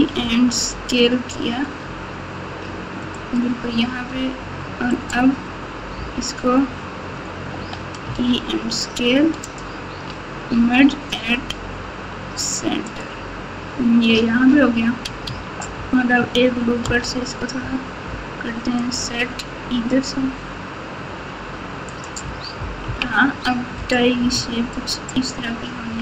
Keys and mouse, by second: 4.0 s, 5.9 o, 7.5 e, 10.5 m, 14.0 Tab, 15.2 Tab, 16.8 ctrl+r, 22.8 KP_1, 24.3 Tab, 25.1 Tab.